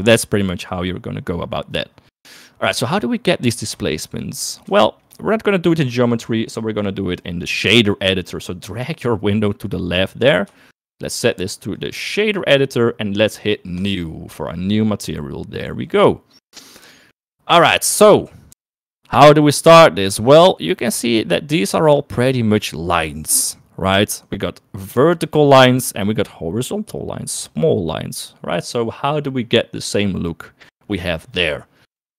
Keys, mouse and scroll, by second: 4.1 shift+middle click, 5.1 shift+middle click, 8.0-10.0 drag, 10.8 shift+click, 11.9 click, 14.8 middle click, 16.0 click, 17.4 shift+middle click, 29.2 middle click.